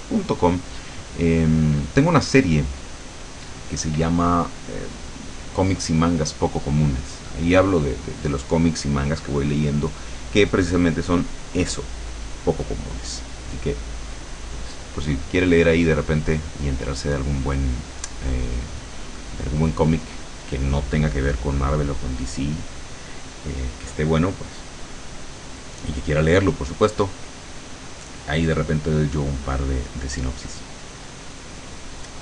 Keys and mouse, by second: 16.3 click.